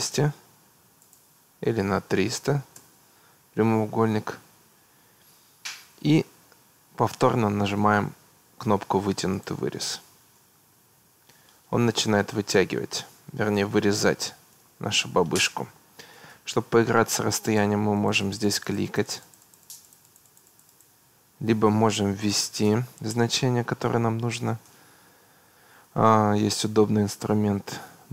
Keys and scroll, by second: 1.8 3, 2.6 0, 2.8 Return, 22.3 2, 22.8 0, 23.1 Return.